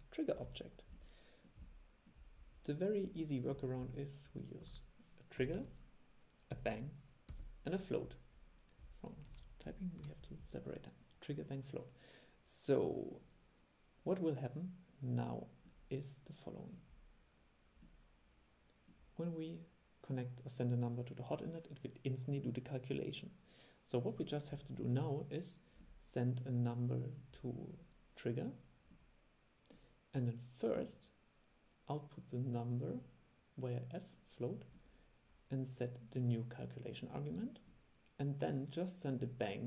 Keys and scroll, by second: 4.8 super+1.